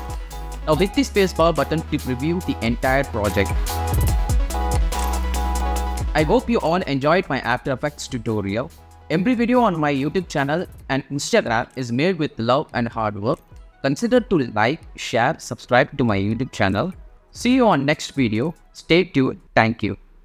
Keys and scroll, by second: 0.7 space.